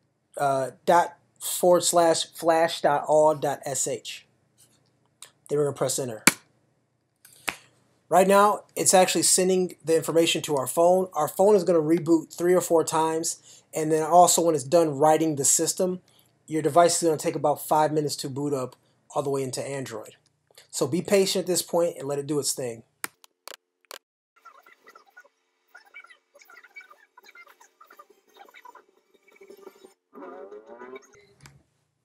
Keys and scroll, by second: 6.3 Return.